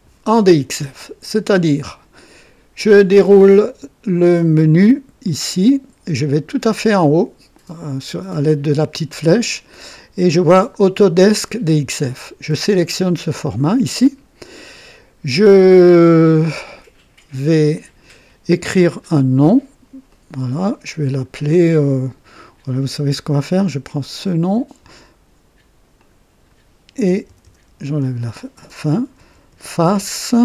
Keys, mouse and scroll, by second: 5.2 click, 12.1 click, 20.1 click, 24.2 click, 25.9 click, 27.1-30.4 typing.